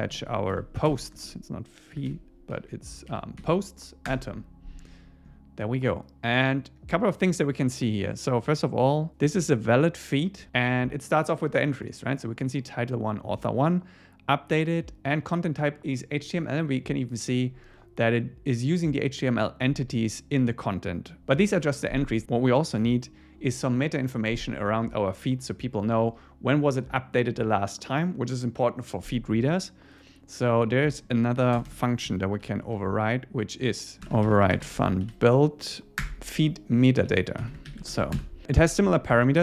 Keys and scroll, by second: 0.6 Right, 4.1 Return, 31.6 Return, 36.0 Return, 37.1 Up, 37.5 Down, 37.7 super+Right, 37.9 shift+super+Left, 39.1 Escape.